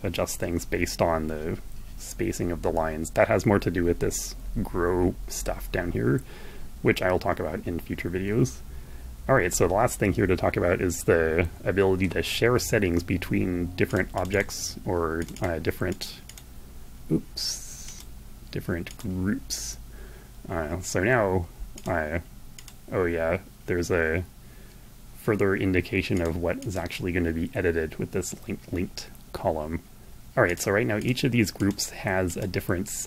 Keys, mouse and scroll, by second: 12.9 click, 14.5 click, 15.2 click, 15.5 click, 17.1 click, 18.1 click, 20.6 click, 21.8 click, 25.3 click, 29.7 click, 30.2 click, 30.7 click, 31.5 click.